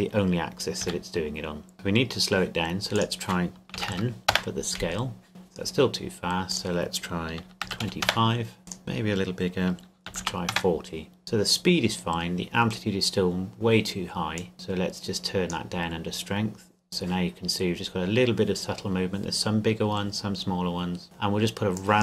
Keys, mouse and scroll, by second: 0.8 KP_3, 1.7 KP_Enter, 2.9 click, 3.7 KP_1, 3.9 KP_0, 4.3 KP_Enter, 5.3 click, 7.6 KP_2, 7.8 KP_5, 8.0 KP_Enter, 8.7 click, 10.1 KP_4, 10.2 KP_0, 10.5 KP_Enter, 14.4 click, 17.8 scroll up 1, 21.8 click.